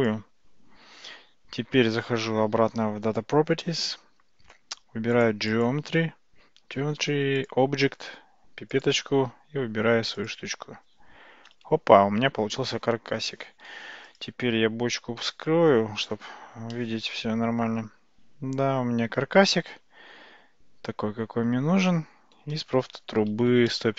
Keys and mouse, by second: 5.2 click, 7.4 click, 8.8 click, 13.9 alt+z, 14.1 click, 15.2 h, 16.8-22.4 middle drag, 23.7-23.9 shift+middle drag.